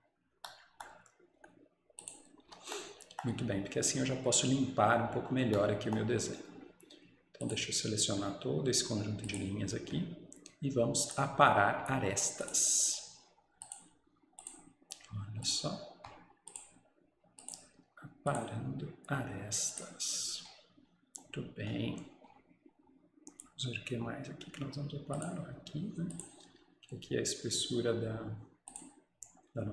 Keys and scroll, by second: 2.3 Escape, 2.5 Escape.